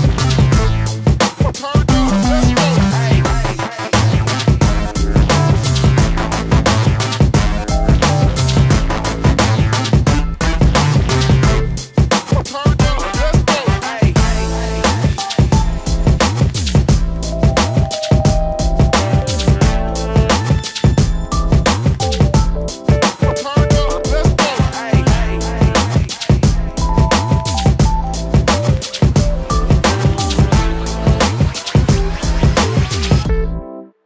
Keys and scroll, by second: 1.0 p, 3.0 shift+space, 4.7 ctrl+g, 19.3 space, 19.4 Escape, 24.8 space.